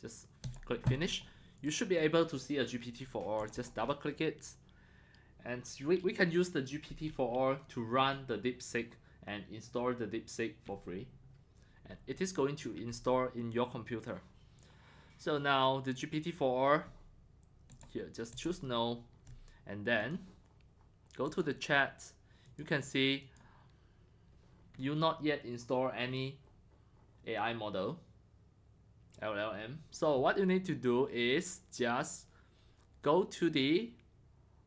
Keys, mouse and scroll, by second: 0.4 click, 1.1 click, 1.6 click, 3.4 click, 3.6 click, 14.9-15.5 scroll down 2, 17.7 click, 17.9 drag, 18.1 click, 20.0 click, 21.3 click, 22.5 click, 23.2 click.